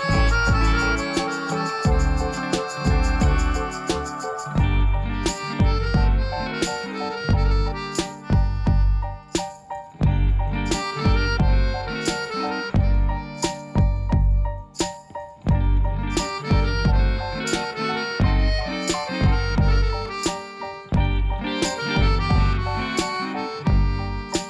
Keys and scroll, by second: 15.9 5, 16.4 Return, 22.8-24.2 typing.